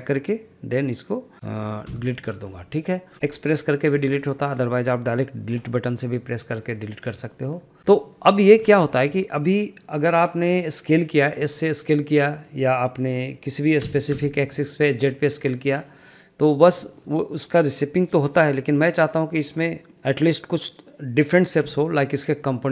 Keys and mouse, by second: 1.3 d, 1.9 Delete, 2.4 middle click, 3.1 shift+middle click, 3.4 shift+middle click, 4.1 shift+middle click, 4.4 shift+middle click, 6.5 shift+middle click, 7.3 shift+middle drag, 7.9 shift+middle click, 8.7 shift+middle click, 9.3 shift+middle drag, 11.5 s, 13.9 s, 14.2 z, 16.9 shift+middle click, 22.1-22.5 middle drag.